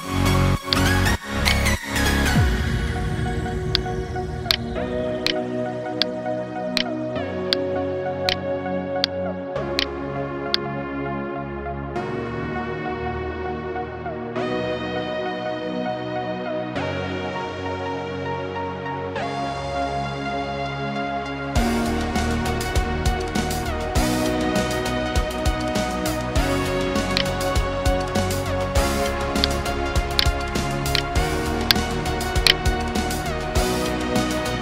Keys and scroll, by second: 0.4 ctrl+space.